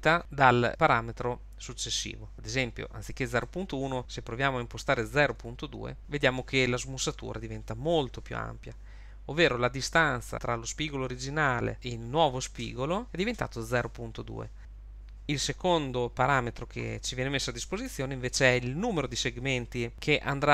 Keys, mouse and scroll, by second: 3.4 click, 10.3 Tab, 17.9 Tab.